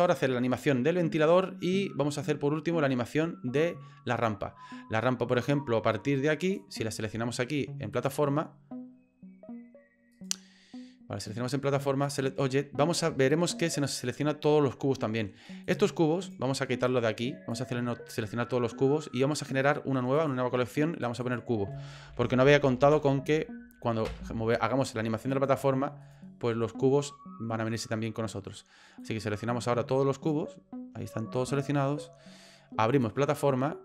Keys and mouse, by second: 7.9 click, 10.2-12.2 right drag, 14.0-15.3 middle drag, 16.2 right click, 16.8 click, 19.3 right click, 21.2-24.8 drag, 25.4 right click, 29.2-30.3 drag, 31.0 middle click, 31.7 shift+click.